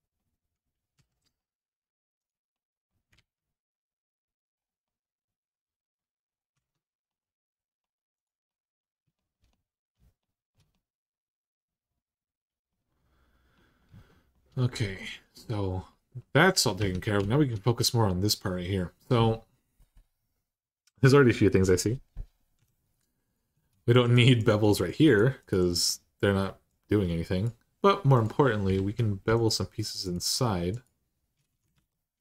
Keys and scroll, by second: 0.7 3, 2.9 alt+z, 6.3 Tab, 16.6 Tab, 21.8 Tab, 22.4 2, 28.5 alt+z, 31.5 ctrl+z.